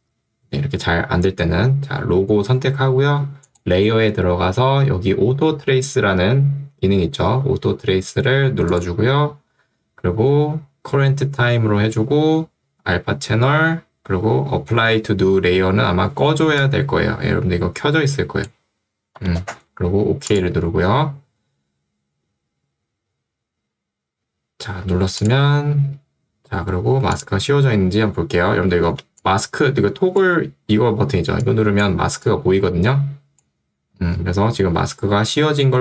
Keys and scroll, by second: 16.2 ctrl+2, 19.2 Escape, 28.9 ctrl+2, 33.9 Escape.